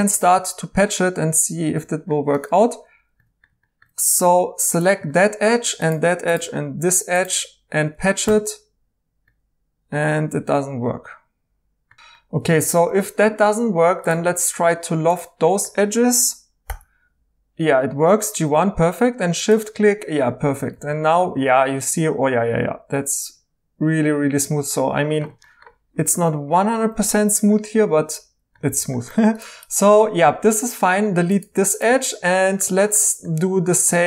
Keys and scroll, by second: 4.2 2, 8.2 Tab, 11.9 Escape, 11.9 z, 11.9 i, 11.9 e, 12.6 e, 16.6 i, 20.8 e, 28.7 e, 31.5-31.8 typing.